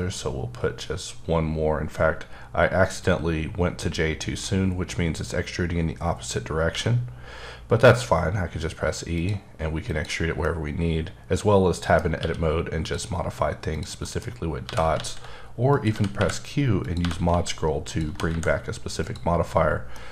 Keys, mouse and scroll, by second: 6.7 e, 9.1 e, 9.2 click, 9.8 click, 10.4 middle click, 12.2 q, 12.8 click, 13.2-13.7 scroll down 1, 13.7 click, 14.0 middle click, 14.3-14.7 scroll up 1, 14.7-18.3 typing, 15.7 click, 16.8 click, 19.0 click, 19.9 middle click.